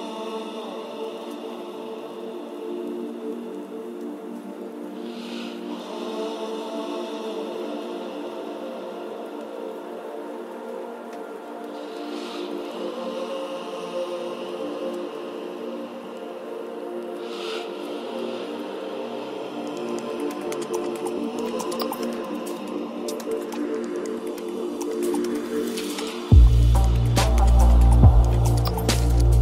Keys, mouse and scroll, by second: 2.6 click, 4.1 click, 4.7-7.7 drag, 8.1-13.3 middle drag, 14.6-17.6 middle drag, 18.0-18.7 scroll down 1, 18.7 click, 19.5-22.5 shift+middle drag, 23.5 click, 24.2-27.3 middle drag, 27.4-28.7 middle drag, 28.7 click, 29.3-29.4 middle drag.